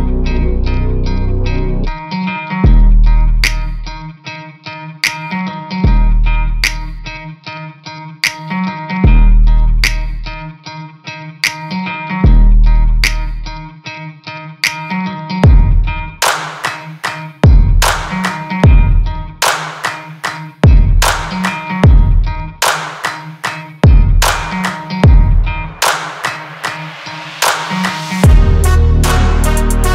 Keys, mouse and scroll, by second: 1.4-1.8 scroll up 2, 1.8 click, 3.0-4.0 scroll up 1, 4.0-4.4 scroll up 1, 4.4-5.8 scroll down 2, 5.8-7.7 drag, 7.7-9.3 scroll down 1, 9.3-11.0 drag, 12.1 click, 13.4 click, 16.8-19.3 drag, 19.3-22.3 right drag, 27.2-29.9 drag.